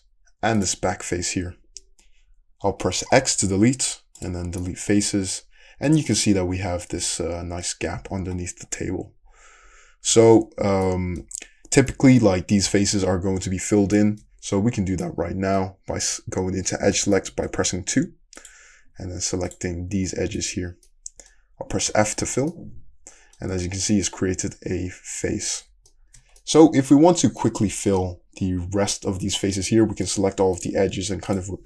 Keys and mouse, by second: 3.1 x, 18.0 2, 18.4 click, 18.9 shift+middle click, 19.5 shift+click, 20.5-30.1 shift+middle drag, 22.5 f, 30.1 click, 30.4 shift+middle click, 31.3 shift+click, 31.4-31.6 middle drag.